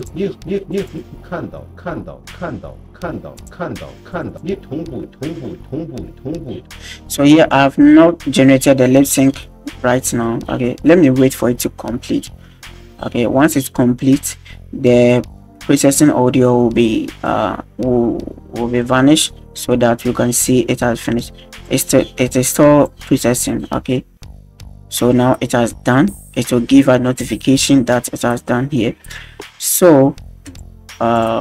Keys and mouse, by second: 0.1 click, 0.8 click, 3.5 click, 4.3 click, 6.5 space, 21.6-23.0 drag, 30.5 click.